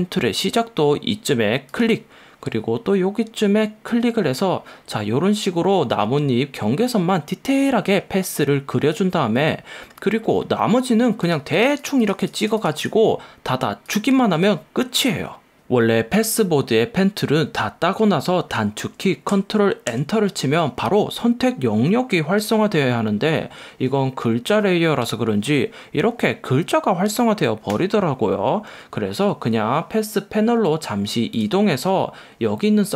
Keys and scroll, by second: 20.0 super+Return, 27.9 Escape.